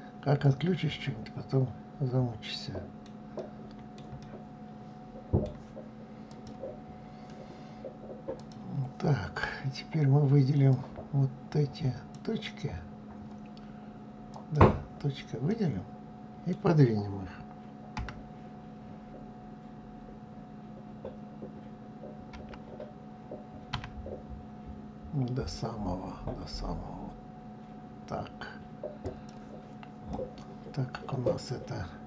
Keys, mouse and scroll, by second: 3.0-5.9 middle drag, 5.9 click, 8.0-10.5 drag, 13.9 click, 15.1-17.6 middle drag, 17.6 g, 29.7-32.0 middle drag.